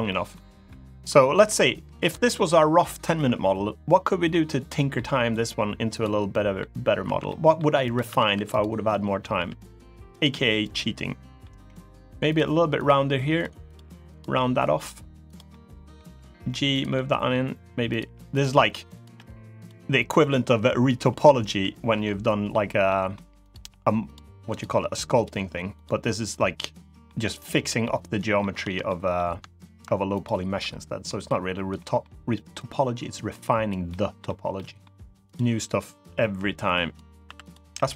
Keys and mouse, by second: 0.4-0.8 middle drag, 1.4-1.8 middle drag, 2.0 middle drag, 3.8 middle drag, 4.4 middle click, 6.0 middle drag, 6.8 1, 7.0 middle drag, 7.6 click, 7.8 Tab, 8.1 1, 8.6 middle click, 9.1 g, 9.8 click, 10.5 click, 10.7 middle click, 11.3 g, 12.0 click, 12.6 click, 13.1 g, 13.5 g, 13.8 click, 14.1 middle click, 15.0 click, 15.2 middle click, 15.8 g, 16.5 click, 16.7 middle click, 17.6 click, 18.1 click, 18.1 g, 18.9 g, 19.3 click, 21.8 middle click, 22.6 middle click, 23.2 click, 23.3 g, 23.8 click, 24.2 click, 24.5 g, 24.9 click, 26.3 middle click, 27.3 click, 27.6 middle click, 28.6 shift+middle click, 29.9 ctrl+shift+click, 30.8 middle click, 31.5 middle click, 32.4-33.4 drag, 33.6 middle click, 34.3 middle click, 34.8 2, 35.1-36.7 drag, 37.0 1, 37.5 g, 37.8 click.